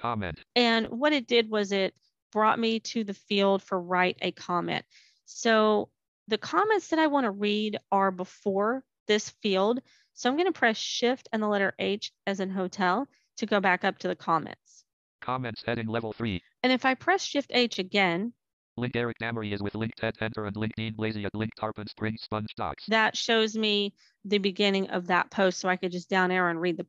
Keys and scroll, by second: 10.7 shift+h, 26.4 h.